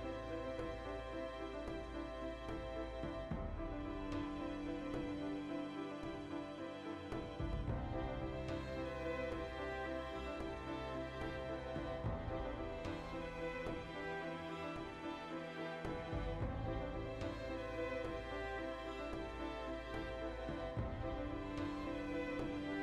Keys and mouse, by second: 0.6 click, 1.4-11.4 middle drag, 11.4 right click, 11.5 ctrl+middle click, 12.0 right click, 12.1 middle click, 13.0 ctrl+right click, 13.6 middle click, 14.4 ctrl+right click, 15.3 ctrl+z, 15.4 shift+right click, 16.1 shift+middle click, 16.7 o, 17.0 click, 17.6-19.2 middle drag, 17.8 g, 19.2 click, 19.7-21.9 middle drag, 19.7 alt+q, 21.6-22.8 typing, 21.9 click, 22.0 middle click.